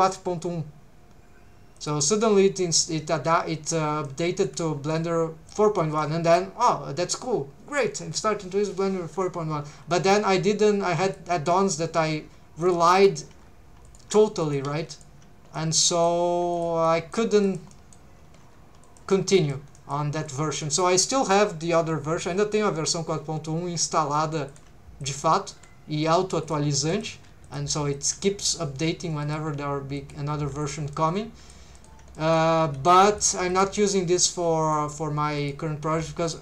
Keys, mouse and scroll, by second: 1.8 click, 4.0 middle click, 4.4 scroll up 2, 4.9 middle click, 5.8 middle click, 9.6 g, 10.1 shift+click, 11.0 click, 11.5 middle click, 12.7 shift+click, 12.9 click, 13.8 shift+click, 14.4 click, 14.6 g, 14.9 shift+right click, 15.6 middle click, 16.5 click, 16.8 middle click, 17.4 click, 17.7 middle click, 18.4 g, 18.8 shift+click, 19.4 click, 19.8 middle click, 20.3 click, 20.6 middle click, 20.7 scroll up 1, 23.1 scroll up 1, 23.8 g, 24.5 shift+click, 25.0 click, 25.5 r, 26.4 click, 26.9 click, 27.1 g, 27.4 shift+click, 27.9 click, 28.8 shift+v, 29.2 shift+click, 29.5 shift+v, 30.0 shift+click, 30.4 g, 30.6 shift+click, 30.9 middle click, 31.8 shift+middle click, 32.2 middle click, 32.6 g, 33.1 shift+click, 33.5 click, 33.7 g, 34.2 shift+click, 34.6 click, 35.4 click, 35.9 g, 36.2 shift+click.